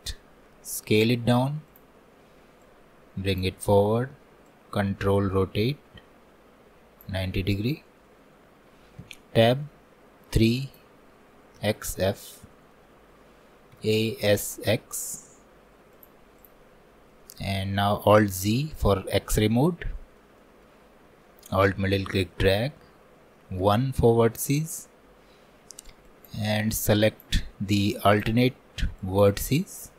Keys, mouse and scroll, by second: 1.0 s, 2.8-7.5 drag, 9.1 Tab, 9.4 middle click, 10.3 3, 12.4-13.8 middle drag, 13.8 a, 16.8-17.1 scroll up 1, 17.1-18.4 middle drag, 18.4 alt+z, 20.4 alt+middle click, 21.3-23.7 shift+middle drag, 23.7 1, 26.1-29.9 shift+drag.